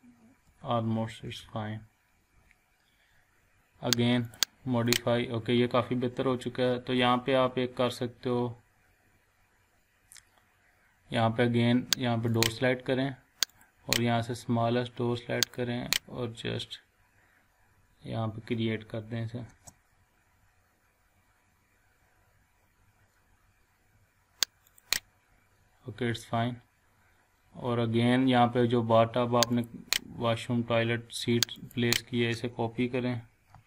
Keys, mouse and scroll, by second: 0.4 Right, 1.1 Down, 1.4 Left, 4.2 click, 5.1 scroll down 1, 6.1 scroll up 1, 7.6 scroll down 1, 8.0-8.8 scroll up 1, 12.3 click, 19.5 space, 24.7 click, 26.4 scroll down 1, 26.8 scroll up 1, 27.5 scroll down 1, 29.5 click, 29.9 scroll down 1, 30.5 scroll up 1, 31.5 click, 33.5 ctrl+c.